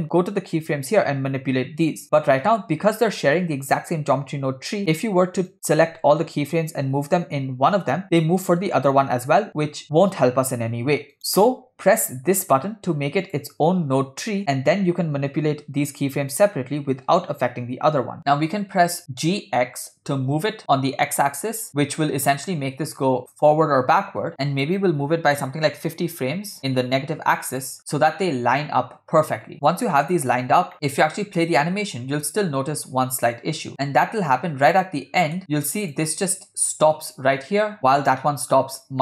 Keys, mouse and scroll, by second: 1.3 scroll down 1, 4.8 s, 5.9 a, 6.8 g, 13.2 click, 15.3 g, 30.7 middle click, 31.7-34.8 drag, 35.1-35.4 scroll down 2, 35.4 click, 35.4 scroll up 1, 37.8 click.